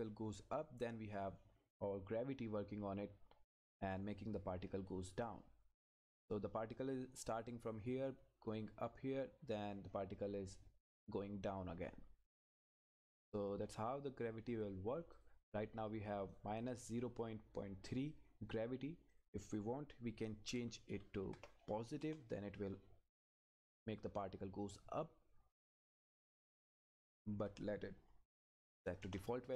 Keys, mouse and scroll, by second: 12.8 click, 19.1 click, 20.4 Left, 22.0 Return, 23.4 click, 25.8 click, 27.3 Left, 29.0 Return.